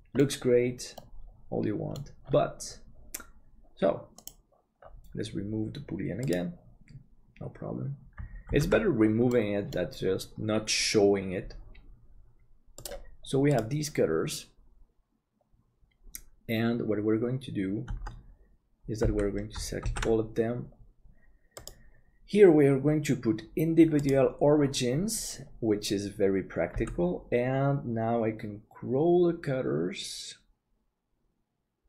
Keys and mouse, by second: 1.0-2.0 middle drag, 8.7 ctrl+s, 9.3 middle click, 12.8 click, 17.9 Tab, 19.0 a, 20.1 ctrl+s, 22.0-24.6 drag, 26.8 s.